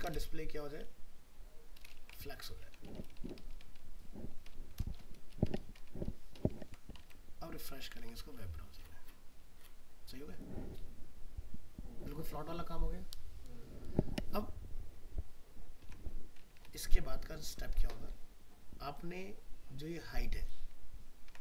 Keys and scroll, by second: 1.1 ctrl+v, 6.6 ctrl+s, 7.0 alt+Tab, 15.8 alt+Tab, 21.3 ctrl+x.